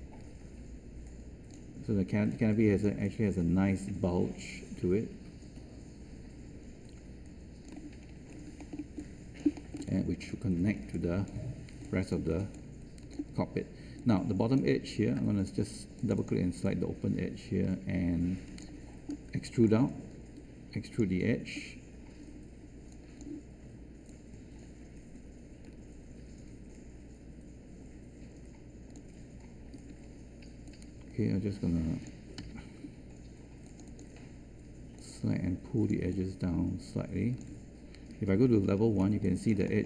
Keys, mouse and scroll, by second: 2.1 space, 29.7 w, 38.4 1.